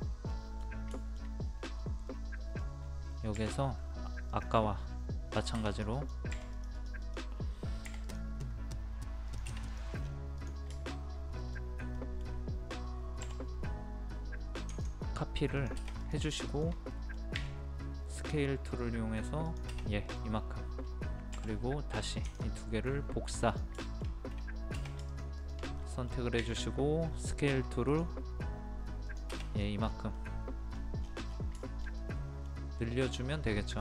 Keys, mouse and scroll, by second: 0.3 middle click, 1.4-2.1 scroll up 1, 2.1 middle click, 2.8-3.4 scroll up 1, 3.4 typing, 4.3 click, 10.0 scroll down 1, 10.1 scroll up 1, 10.4 click, 10.7 shift+middle click, 11.1-11.4 scroll up 1, 11.4 middle click, 13.2 m, 14.7 ctrl+click, 16.5 shift+click, 16.9 middle click, 17.5-18.2 scroll up 1, 18.2 click, 19.9 middle click, 20.3-21.3 scroll down 1, 22.2 click, 23.8 shift+middle click, 25.1 shift+click, 25.8 middle click, 27.1-27.9 scroll up 1, 27.9 click, 29.6 scroll down 1, 30.2 middle click, 30.7 scroll down 1, 31.3 scroll up 1, 31.9 shift+middle click, 32.7-33.1 scroll up 1, 33.5-33.8 middle drag.